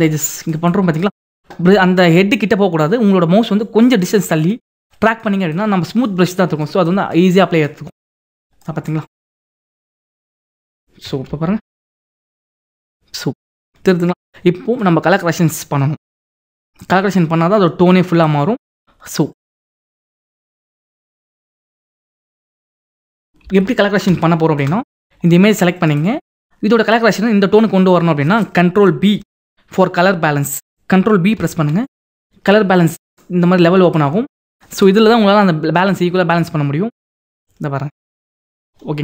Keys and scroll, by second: 11.3 ctrl+-, 21.0 ctrl+-, 23.5 ctrl+=, 31.4 ctrl+b.